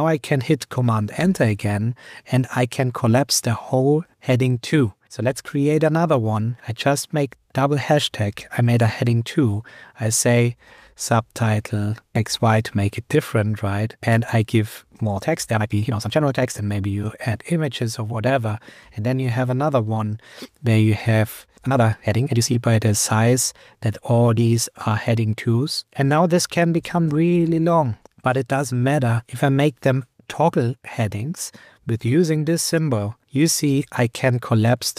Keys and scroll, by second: 1.2 super+Return, 3.7 super+Right, 7.5 shift+#, 11.8 BackSpace, 12.1 shift+y, 19.4 shift+#, 21.6 BackSpace, 22.7 Up, 28.6 Up, 33.6 super+Return, 34.1 Up.